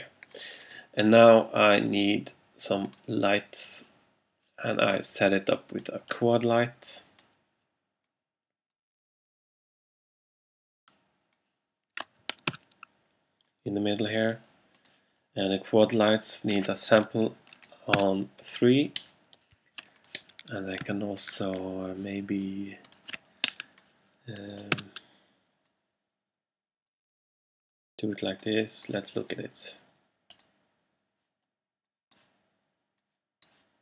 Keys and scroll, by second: 12.6 r, 18.0 3, 24.8 r.